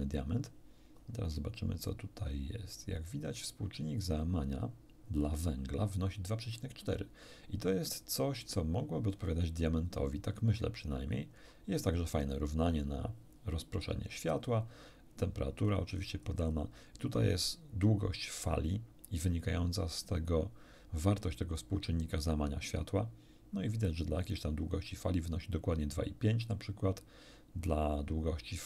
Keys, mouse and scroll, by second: 1.0 scroll down 1, 2.0-2.7 scroll down 4, 3.0-3.4 scroll down 2, 4.1-4.7 scroll down 2, 9.4-9.8 scroll down 2, 10.0-10.8 scroll down 4, 11.4 scroll down 1, 14.6-14.9 scroll down 1, 15.6-16.2 scroll up 1.